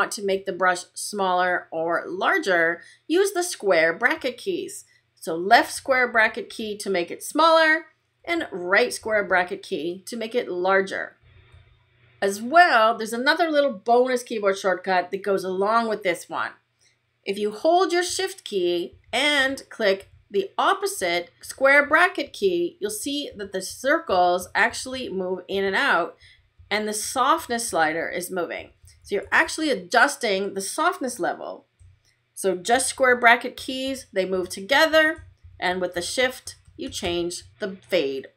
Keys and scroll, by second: 5.4 [, 8.1 ], 11.7 shift+], 18.8 shift+[, 22.8 shift+], 26.1 shift+[, 28.5 shift+], 32.6 shift+], 33.4 [, 34.6 ], 35.3 shift+[, 36.1 shift+].